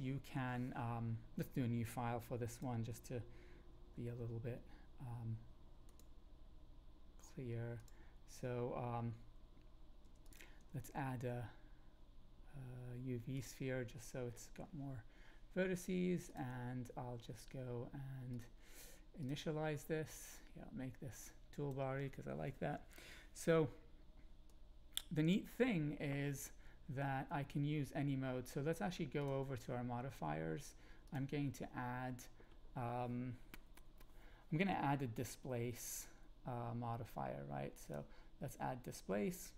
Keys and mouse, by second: 3.8 ctrl+n, 10.0 x, 10.7 shift+a, 16.2 click, 18.4 click, 20.3-21.7 drag, 24.4-25.5 drag, 31.2-37.9 drag.